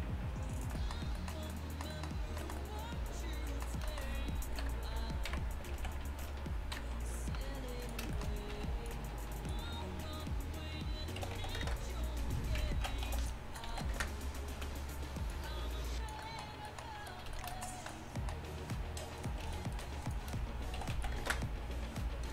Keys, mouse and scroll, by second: 4.7 KP_3, 5.3 KP_1, 5.8 z, 6.8 KP_3, 8.6 b, 11.2 s, 12.8 ctrl+z, 13.1 s, 14.6 z, 15.3-17.4 drag, 19.2-22.3 right drag, 20.7 s.